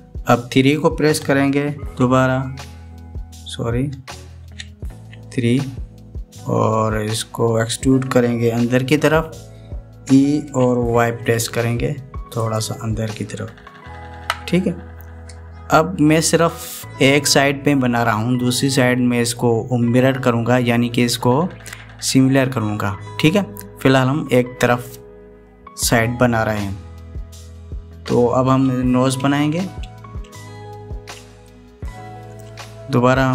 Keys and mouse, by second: 2.7 KP_Decimal, 4.6 KP_Enter, 5.2 KP_Decimal, 5.7 KP_3, 11.3 e, 15.0 KP_1, 32.2 shift+middle click.